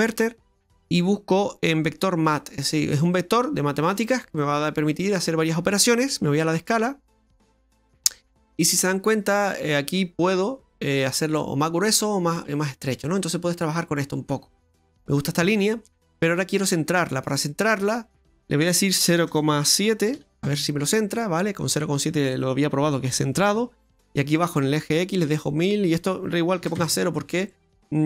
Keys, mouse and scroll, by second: 4.6 click, 8.0-8.9 scroll up 5, 10.2 click, 15.6 middle click, 17.6 click, 25.9 click.